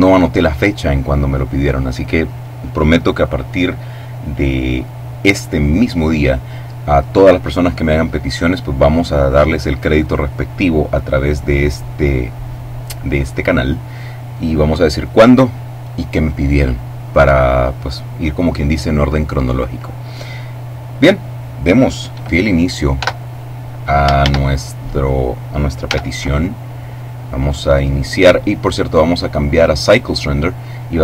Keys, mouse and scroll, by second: 23.0 x, 23.3 click, 24.2 shift+a, 24.9 click, 25.8 s, 27.0 click, 28.9 click, 29.8 click.